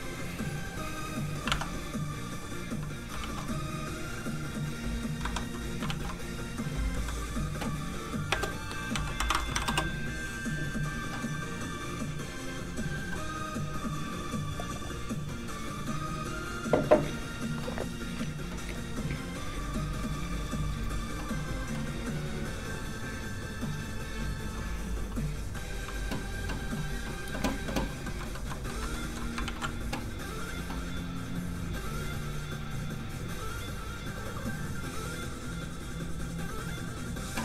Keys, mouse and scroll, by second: 0.7 click, 0.8 click, 1.4 alt+click, 1.5 alt+click, 1.6 click, 3.2 shift+super+s, 5.2 super+s, 5.3 Escape, 5.8 shift+super+s, 6.9 shift+s, 7.0 Escape, 8.1 click, 8.3-9.6 typing, 9.7 Return, 13.5 click, 28.0 middle click, 28.1 shift+middle click, 29.3 shift+middle click, 31.4 ctrl+shift+s, 31.4 click, 31.5 click.